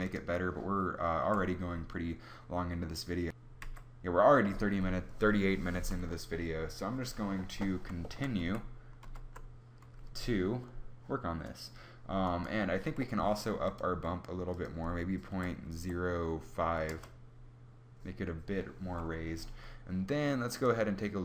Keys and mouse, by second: 0.0 Tab, 8.3 alt+g, 8.8 alt+h, 13.4 click.